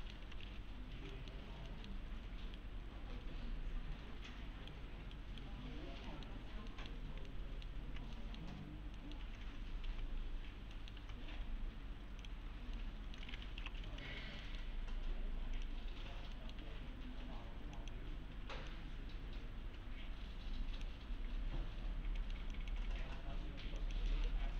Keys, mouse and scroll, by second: 0.0 middle click, 0.0-0.9 typing, 1.1 middle click, 1.3-1.7 scroll down 1, 1.7 middle click, 2.3 scroll down 1, 2.6-4.8 right click, 5.7-6.1 scroll up 1, 6.1 middle click, 7.0 scroll down 1, 7.3-7.9 alt+middle click, 9.8 ctrl+v, 10.7 middle click, 11.0 ctrl+v, 12.2 click, 12.8-13.4 alt+middle click, 13.6 l, 13.9 z, 14.1 scroll down 1, 14.4 middle click, 14.7-15.6 scroll up 1, 15.6 click, 16.4 middle click, 16.6 1, 17.1-17.8 scroll up 1, 17.8 click, 21.1-21.5 scroll down 1, 22.2 middle click, 22.5 click, 22.9-23.4 scroll up 1, 23.4 scroll down 1, 23.8 ctrl+click, 24.1 middle click.